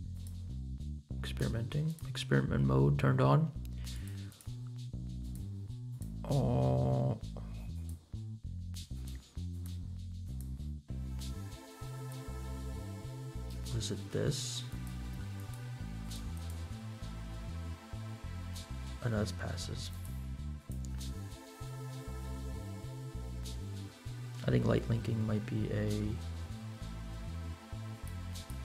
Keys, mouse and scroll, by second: 0.1 click, 1.8 click, 4.3 click, 5.2 click, 5.8 click, 7.7 click, 8.9 click, 9.5 click, 10.2 click, 11.9 click, 14.9 click, 15.5 click, 16.1 click, 19.9 click, 20.5 click, 21.6-23.1 scroll down 4, 23.2-24.6 scroll down 4, 24.9-25.6 scroll down 2, 26.2-27.0 scroll down 2, 27.1-27.8 scroll down 2, 27.9 click, 28.3 click.